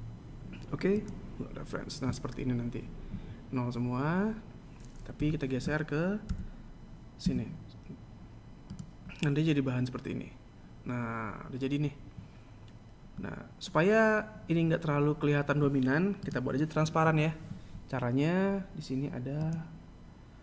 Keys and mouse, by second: 2.0 KP_7, 3.1 g, 13.0 right click, 16.2 click, 17.8 click, 18.4-20.4 drag.